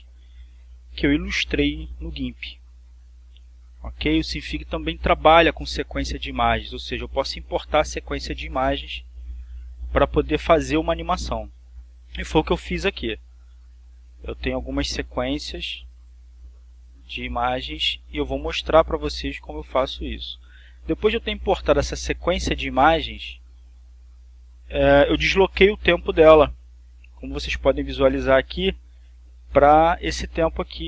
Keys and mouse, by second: 20.0-23.1 drag, 23.7-25.6 drag, 30.5 click.